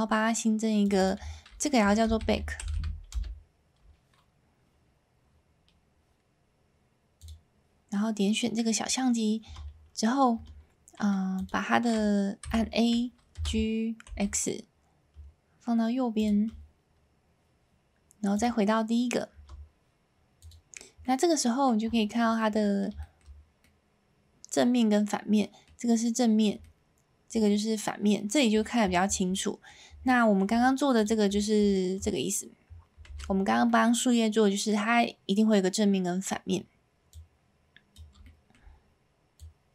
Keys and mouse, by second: 0.8-3.9 drag, 7.2 click, 9.4 Tab, 10.3 Tab, 12.4 a, 13.3 g, 14.0 x, 16.1 shift+click, 18.3 click, 19.3 Tab, 20.4 click, 21.0-21.6 middle drag, 22.4-22.8 middle drag, 23.0 shift+middle drag, 23.6-25.7 middle drag, 26.6-27.4 middle drag, 29.3-29.7 middle drag, 30.0-30.4 shift+middle drag, 31.3 middle drag, 32.9 a, 33.6-34.7 middle drag, 37.1 click, 38.1 s, 38.2-38.5 middle drag, 39.4 click.